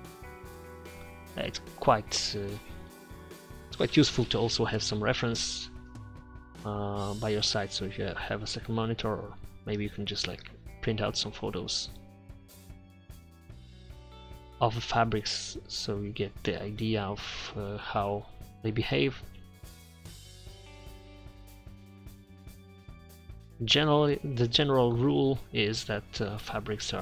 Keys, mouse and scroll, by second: 1.5 4, 1.7-4.0 drag, 4.2 click, 4.8 middle click, 6.6 click, 7.4 click, 9.0 click, 9.6 Return, 12.6 middle click, 12.8 z, 13.4 middle click, 13.6 click, 14.7 click, 15.4 click, 15.5 middle click, 15.7 z, 16.7 click, 17.8 click, 18.1 4, 19.1 click, 22.7 middle click, 23.1 middle click, 23.8 ctrl+z, 23.9 ctrl+z.